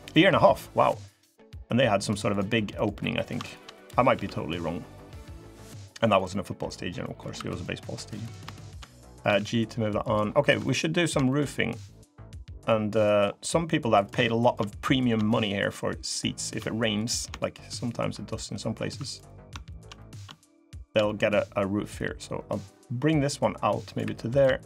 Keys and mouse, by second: 3.2 shift+click, 3.9 g, 5.9 click, 6.2 middle click, 6.8 click, 6.8 middle click, 7.1 3, 7.4 middle click, 9.0 g, 10.2 3, 10.4 middle click, 11.0 shift+middle click, 11.6 click, 12.2 click, 12.7 click, 14.2 shift+click, 14.6 click, 15.0 shift+click, 16.4 click, 18.1 middle click, 19.2 3, 19.5 shift+click, 19.7 click, 20.6 shift+click, 20.8 click, 21.0 middle click, 21.8-23.7 drag, 24.1 click, 24.1 3.